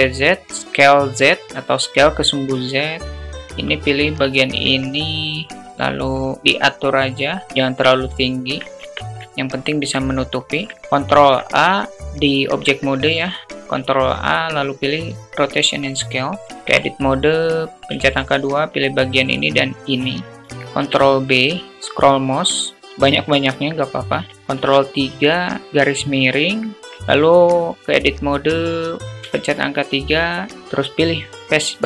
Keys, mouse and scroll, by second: 0.1 s, 0.4 click, 1.4-2.7 drag, 3.1 Tab, 3.1 alt+z, 3.1 click, 5.3-7.3 drag, 7.5 alt+z, 8.2 Tab, 8.7-9.4 middle drag, 9.9 alt+middle click, 10.7 ctrl+a, 16.4 Tab, 17.7 2, 17.9 click, 18.8 shift+click, 19.0 shift+click, 20.2 ctrl+b, 23.6 Tab, 24.3 ctrl+3, 25.6 /, 25.9-26.5 alt+middle drag, 26.8 Tab, 28.7 3, 29.7 click.